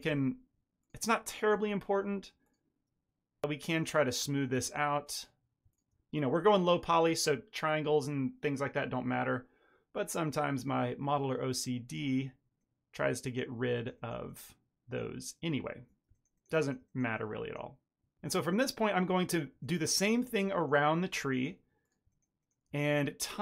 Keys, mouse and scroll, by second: 1.4 s, 3.0 Tab, 3.1 ctrl+middle click, 3.9 middle click, 4.1 Tab, 4.3 middle click, 4.6 shift+middle click, 5.1 click, 5.6 shift+click, 6.3 m, 12.5 middle click, 13.1 ctrl+middle drag, 14.2 middle click, 15.7 Tab, 16.1 ctrl+middle click, 16.3 ctrl+middle click, 16.5 middle click, 16.8 shift+middle click, 17.1 middle click, 18.1 middle click, 18.2 ctrl+middle click, 18.8 shift+middle click, 18.9 middle click, 19.0 Tab, 19.2 middle click, 19.6 2, 19.8 click, 19.9 shift+middle click, 20.0 shift+middle click, 20.4 ctrl+click, 20.5 shift+middle click, 20.7 middle click, 20.8 middle click, 21.2 r, 22.6-23.0 ctrl+drag, 23.2 r.